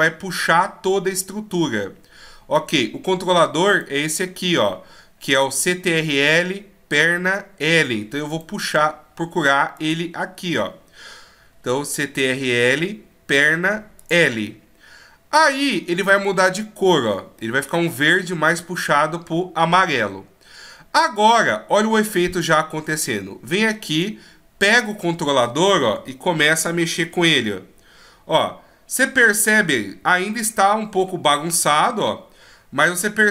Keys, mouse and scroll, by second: 3.7 right click, 8.3 right click, 9.8 click, 17.4 middle click, 23.9 right click, 24.9 middle click, 26.0 KP_3, 26.9 g, 30.3 middle click, 31.5 g.